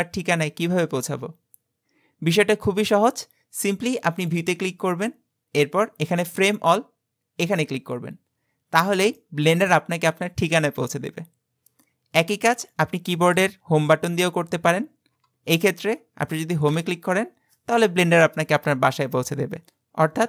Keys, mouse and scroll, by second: 4.2-7.4 drag, 9.2-12.2 middle drag, 13.7-15.5 scroll down 31, 16.7 Home.